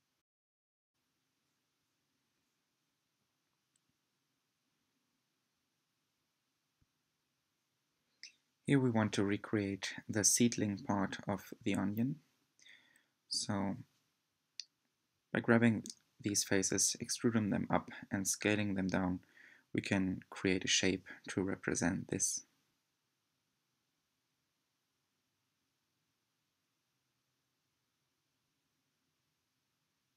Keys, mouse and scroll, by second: 2.6 s, 6.0-7.4 middle drag, 7.4 click, 7.8 shift+click, 8.2 shift+click, 8.6 shift+click, 8.9-9.7 middle drag, 9.7 e, 11.4 s, 12.5-13.6 middle drag, 13.6 drag, 13.9 shift+click, 14.2 shift+drag, 14.5 shift+click, 14.9 e, 16.5 s, 17.9-19.0 middle drag, 19.0 click, 19.2 click, 19.6 shift+click, 19.9 shift+click, 20.3 shift+click, 20.5 middle click, 20.9 e, 22.4 s, 23.6 middle click, 23.9-24.3 scroll down 2, 24.8 g, 26.9-27.7 middle drag, 27.7-28.0 scroll up 4, 28.0 middle click, 28.4 scroll down 1, 28.9 click, 29.2 shift+click, 29.5 shift+click, 29.7 shift+click.